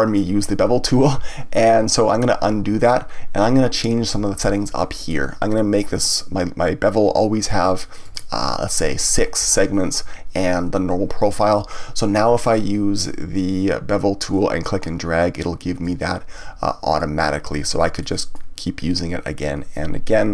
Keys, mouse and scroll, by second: 2.0 ctrl+z, 6.0 click, 7.4-8.9 drag, 14.3 click, 16.9 click, 18.0 middle click, 18.9 click.